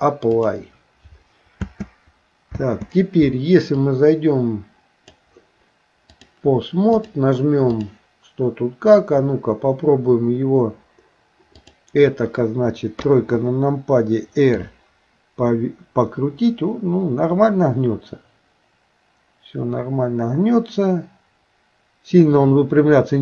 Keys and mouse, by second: 1.6 space, 2.5 space, 3.9-5.3 drag, 6.3 click, 7.0 click, 11.6 click, 13.0 KP_3, 14.6 r.